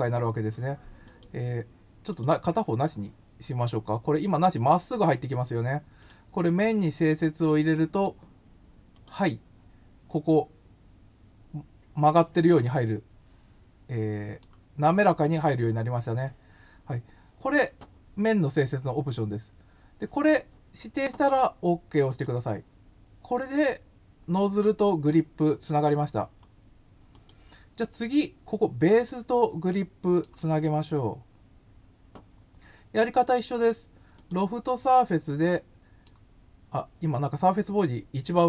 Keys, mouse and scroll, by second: 1.0 click, 2.0 click, 5.9 click, 8.9 click, 12.6-14.3 middle drag, 18.1 scroll down 1, 22.1 click, 26.1 scroll down 1, 27.1 click, 28.8 scroll down 1, 29.0-30.2 middle drag, 31.1 scroll up 1, 34.1 click, 35.5 middle click.